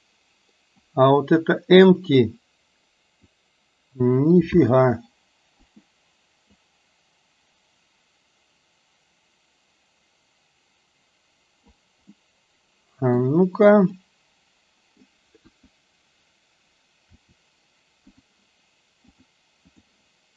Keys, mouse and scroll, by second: 2.1 click, 2.4-3.4 drag, 4.6 r, 6.6-11.9 drag, 12.2-13.3 middle drag, 14.0-15.1 middle drag, 15.5 KP_1, 17.1 r, 19.3 click, 19.9 click.